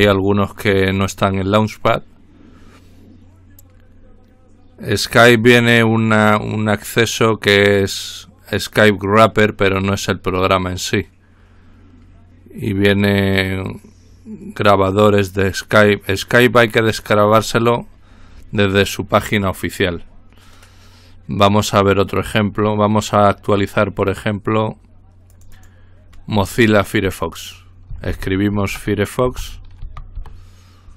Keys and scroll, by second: 28.3-30.3 typing.